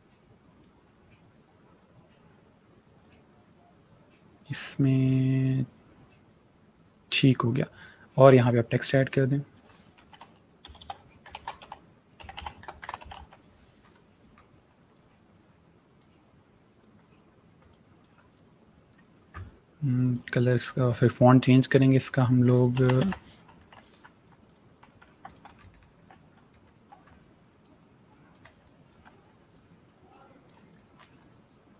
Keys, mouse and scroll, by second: 4.9 click, 7.1 click, 9.8 s, 11.4-13.5 typing, 14.8 click, 22.4-24.0 typing, 24.3 click, 25.4 alt+scroll up 1, 26.0-26.8 scroll up 2, 26.8-27.5 scroll up 2, 27.5 shift+click, 28.5 space, 30.4 shift+click.